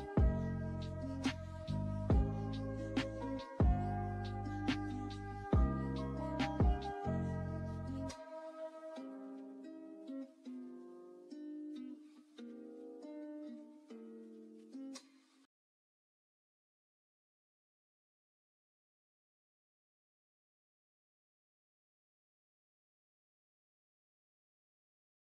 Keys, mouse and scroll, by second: 2.0-5.8 drag, 14.0 ctrl+g, 16.2 shift+click, 21.3-25.3 drag.